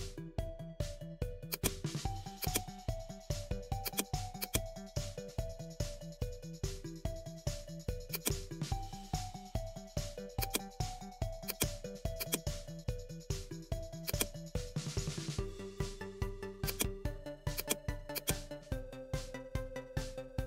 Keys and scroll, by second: 14.7 ctrl+z, 15.9 ctrl+g, 19.6 ctrl+a.